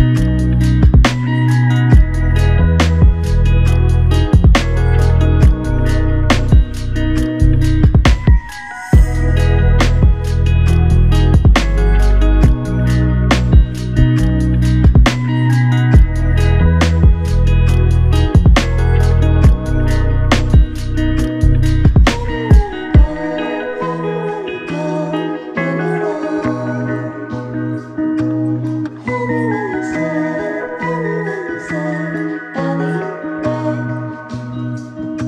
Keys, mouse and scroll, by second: 5.8 ctrl+shift+click, 8.1 ctrl+shift+click, 9.7 ctrl+z, 10.2 ctrl+z, 12.1 ctrl+z, 12.5 ctrl+shift+click, 19.1 ctrl+shift+click, 23.3 alt+click, 24.5 alt+click, 25.6 ctrl+z, 26.1 ctrl+z, 27.4 alt+click.